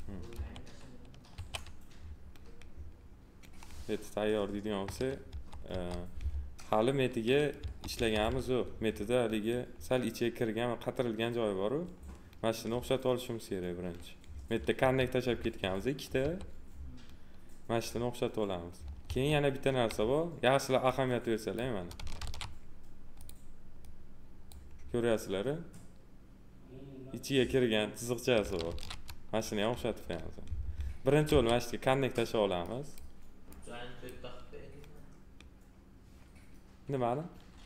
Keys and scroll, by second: 0.3 2, 5.3 F3, 7.5 F3, 14.8 2, 19.0 2, 22.1 ctrl+z, 28.6 ctrl+z, 31.3 2.